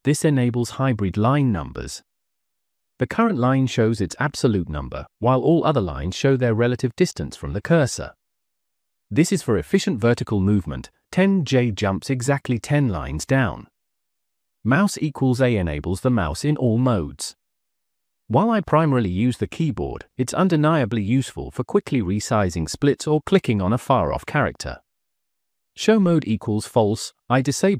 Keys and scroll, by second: 0.0-0.4 typing, 15.8 Escape, 16.2 j, 16.5 j, 16.7 j, 24.1 j, 24.3 j, 24.5 j.